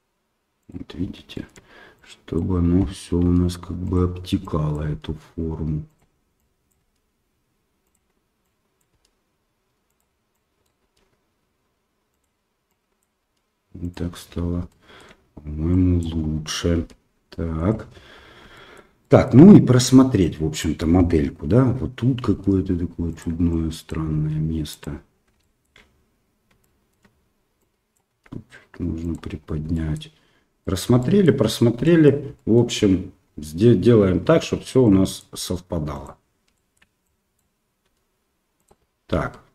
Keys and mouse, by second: 1.4 click, 1.9-3.2 drag, 3.2 g, 4.4 click, 4.8 g, 6.4 click, 6.8 g, 8.5 click, 8.9 g, 10.3 click, 10.8 g, 12.6 click, 13.2 g, 14.8 shift+middle click, 15.8 click, 16.7 g, 18.6 shift+middle click, 19.1 middle click, 20.3 click, 22.3 g, 23.6 click, 24.1 g, 25.5 shift+middle click, 26.6 shift+middle click, 27.7 click, 28.1 g, 29.8 shift+click, 30.7 shift+middle click, 31.1 shift+middle click, 31.9 shift+middle click, 32.4 shift+middle click, 34.9 click, 35.3 g, 36.6 middle click, 37.1 click, 37.8 g, 39.3 Tab.